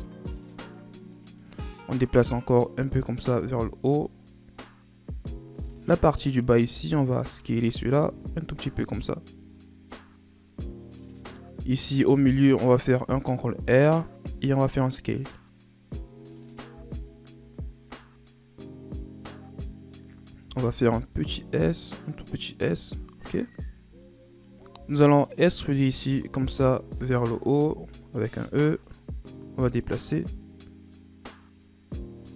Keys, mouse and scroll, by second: 2.0-3.3 drag, 3.3 z, 5.5 z, 6.3 right click, 6.6 b, 8.0 s, 12.1 ctrl+r, 14.3 s, 16.6 z, 20.4 s, 22.8-24.0 scroll up 9, 25.1 alt+right click, 25.8 z, 26.4 z, 27.6 e, 28.8-31.8 drag.